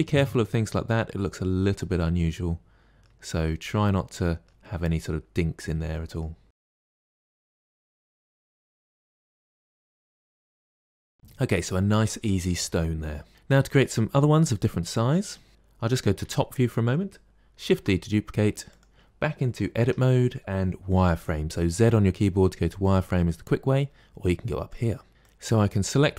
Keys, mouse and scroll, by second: 3.4-6.7 middle drag, 6.7 g, 6.9 middle click, 7.1 click, 7.2 g, 7.4 middle click, 7.8 click, 8.0 middle click, 8.4 click, 8.6 middle click, 9.1 click, 9.4 middle click, 9.9 g, 10.2 middle click, 10.6 click, 10.8 middle click, 10.9 Tab, 11.0 scroll down 3, 16.2 KP_7, 17.7 shift+d, 19.8 Tab, 21.8 z, 25.2 click.